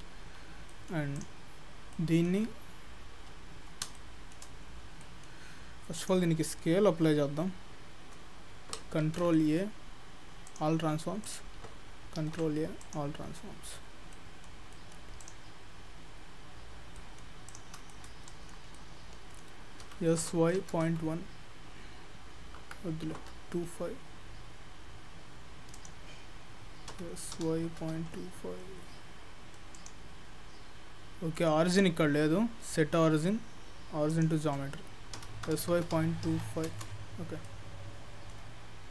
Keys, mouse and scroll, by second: 0.2 Tab, 0.7 middle click, 1.2 click, 1.6-2.5 scroll up 4, 1.9 middle click, 2.5-2.9 scroll up 3, 3.3 scroll up 1, 3.7 scroll down 2, 4.0 shift+middle click, 4.9 scroll down 2, 5.0 middle click, 6.0 click, 9.0 ctrl+a, 11.2 click, 12.5 ctrl+a, 13.2-13.6 scroll up 5, 13.6-14.2 scroll down 7, 14.2 middle click, 14.8 middle click, 15.3 click, 16.2-17.0 scroll up 6, 17.0 middle click, 17.5 click, 17.9 shift+middle click, 18.8 middle click, 19.9 s, 27.0 s, 30.2-31.0 scroll down 4, 31.0-31.4 scroll up 4, 31.4 middle click, 31.7 right click, 35.2 s, 37.2 scroll down 5, 37.5 middle click, 38.6-38.9 scroll up 6.